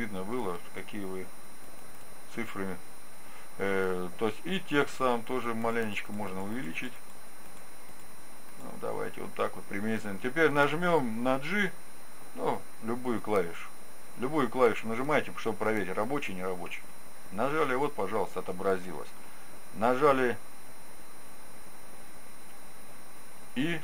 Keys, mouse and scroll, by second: 1.7-4.0 drag, 5.3-10.5 drag, 16.9 g.